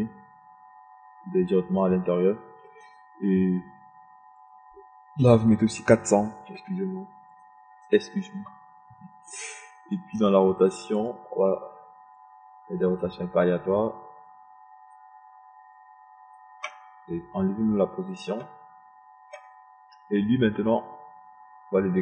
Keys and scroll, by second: 0.8 KP_0, 8.6 KP_4, 8.9 KP_0.